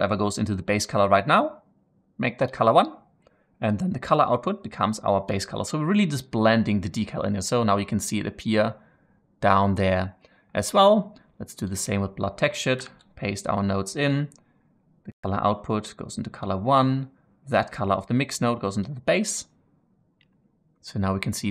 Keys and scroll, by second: 12.7 ctrl+v.